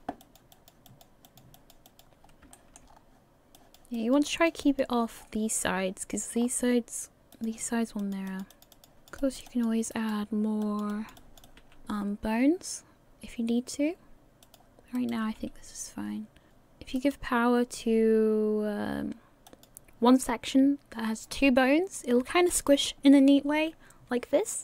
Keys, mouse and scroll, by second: 0.2 click, 0.5 click, 1.5 click, 1.9 click, 2.2 scroll up 1, 2.5 shift+middle click, 2.9 scroll up 3, 3.6 click, 3.6 scroll up 1, 3.9 click, 4.6 click, 5.2 scroll down 6, 6.4 scroll up 1, 7.3 click, 7.3-7.6 scroll up 2, 8.0 click, 8.5 click, 8.7 click, 9.5 click, 10.2 right click, 10.6 click, 10.9 click, 11.4 click, 11.5 click, 11.6 r, 15.2 right click, 15.2 r, 16.5 click, 17.3 right click, 17.6 r, 22.8 right click, 23.2 r.